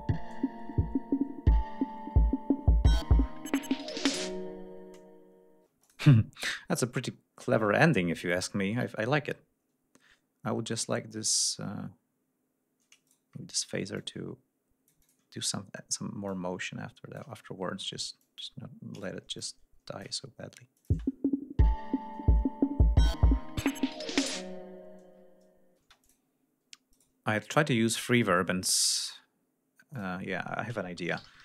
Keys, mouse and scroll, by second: 0.6-1.1 scroll up 2, 1.3-1.6 scroll up 2, 2.8 ctrl+scroll up 2, 3.2 ctrl+d, 5.7 space, 5.9 click, 6.2-6.6 scroll down 2, 6.8 scroll up 2, 7.0-7.7 scroll down 4, 8.4 ctrl+scroll up 2, 10.8 scroll up 2, 13.1 shift+right click, 14.0-15.3 drag, 16.3 click, 17.4 ctrl+scroll down 2, 18.2 ctrl+click, 19.0 shift+right click, 19.4 shift+click, 20.8 click, 20.9 space, 22.6 ctrl+scroll down 2, 22.8 ctrl+scroll up 2, 25.8 space, 26.1 click, 27.0 right click, 30.0 click, 30.8-31.4 typing.